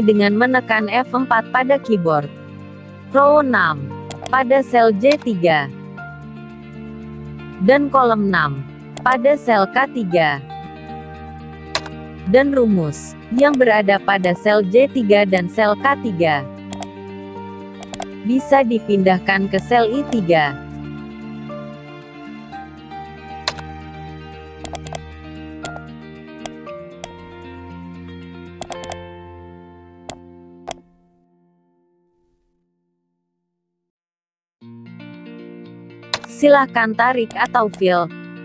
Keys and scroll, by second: 15.1 ctrl+c, 20.6 ctrl+v, 26.4 ctrl+c, 31.8 ctrl+v.